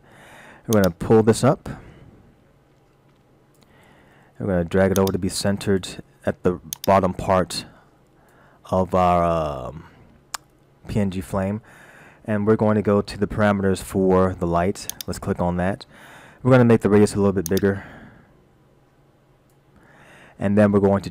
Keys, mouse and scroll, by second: 0.8 click, 3.9-4.2 scroll up 2, 5.0 click, 6.8 click, 14.9 click, 17.6 click.